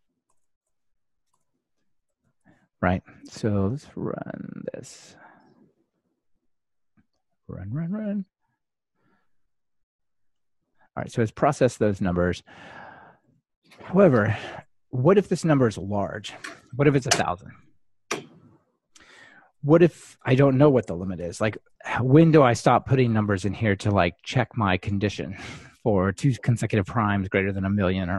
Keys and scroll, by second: 9.1 ctrl+shift+r.